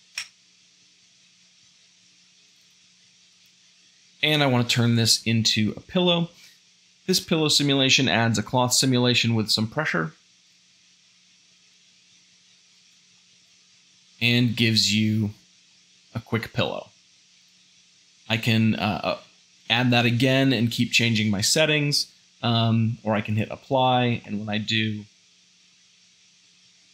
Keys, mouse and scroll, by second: 3.3 a, 11.1 space, 23.9 Tab.